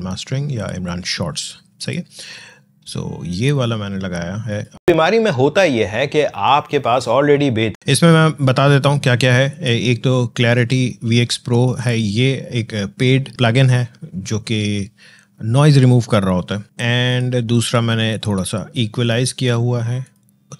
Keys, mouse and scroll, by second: 1.6 click, 4.3 click, 4.8 space, 7.7 space, 9.3 click, 16.9 click.